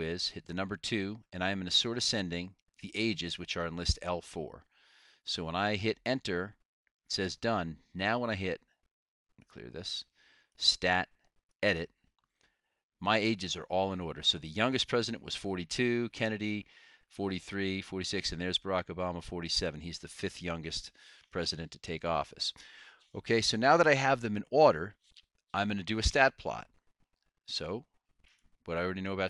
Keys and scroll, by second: 0.3 2, 4.1 4, 6.1 Return, 11.6 Return.